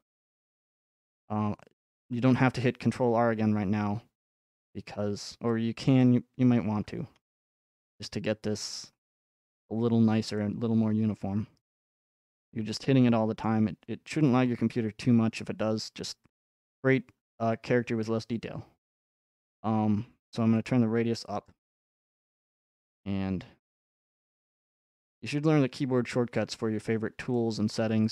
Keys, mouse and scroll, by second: 4.5 middle click, 6.0 middle click, 6.1 middle click, 8.8 middle click, 9.3-10.0 scroll up 5, 11.7 scroll down 1, 12.0-16.3 middle drag, 16.4-18.5 drag, 21.5-23.6 drag, 23.8-25.9 drag, 26.6-28.1 middle drag.